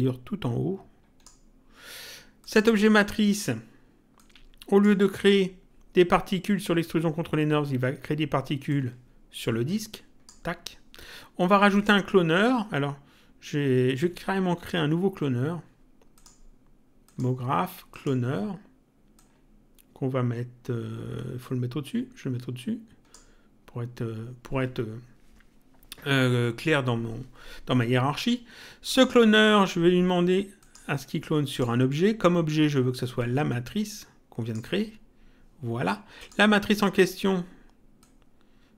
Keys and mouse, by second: 2.4 click, 4.2 click, 8.7 click, 11.7 click, 16.1 click, 19.2 click, 28.9 click, 30.6 click, 33.2 click, 36.2 click, 38.0 click.